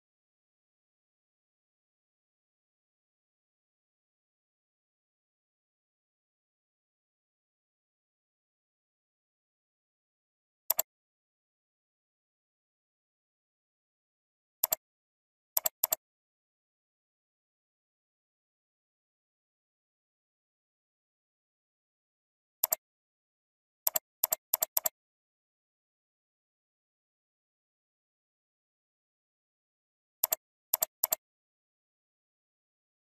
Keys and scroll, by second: 9.9 ctrl+s.